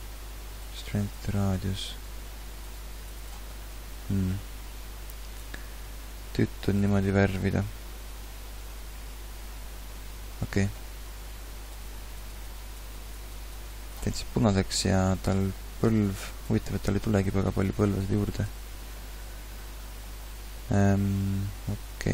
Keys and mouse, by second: 18.7 ctrl+z.